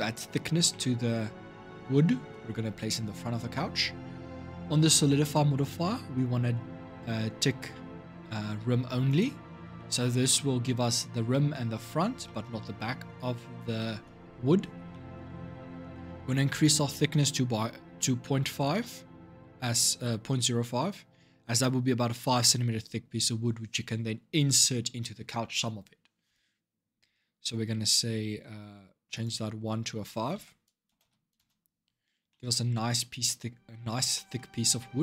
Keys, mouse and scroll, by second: 0.5-1.1 middle drag, 1.1 scroll up 2, 1.8-4.3 middle drag, 4.3-5.0 scroll down 7, 5.0-8.2 scroll down 4, 8.8 click, 9.5 shift+middle click, 9.9 scroll up 1, 10.1-14.3 middle drag, 14.3 scroll down 3, 14.7-16.3 middle drag, 16.3-19.4 drag, 32.1 middle click, 32.8 scroll up 2, 33.9-35.0 shift+middle drag.